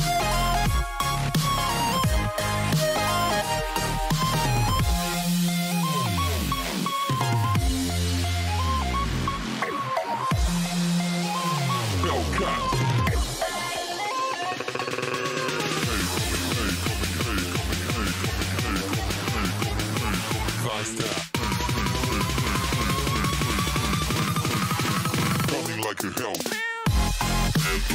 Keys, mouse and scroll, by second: 0.3 n, 4.4-10.6 drag, 10.6 n, 11.9-16.0 middle drag, 15.3 Tab, 16.6 middle click, 17.3-19.8 typing, 20.6-21.9 middle drag, 23.4 ctrl+z, 23.8 ctrl+z, 24.1 ctrl+z, 24.4 ctrl+z, 24.6 ctrl+z, 24.9 ctrl+z, 25.2 ctrl+z, 25.5 ctrl+z, 25.8 ctrl+z, 26.1 ctrl+z.